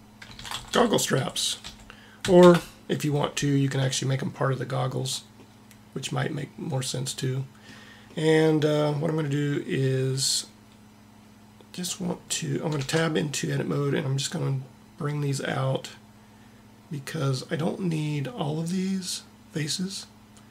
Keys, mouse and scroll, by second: 5.4-7.0 middle drag, 12.9 Tab.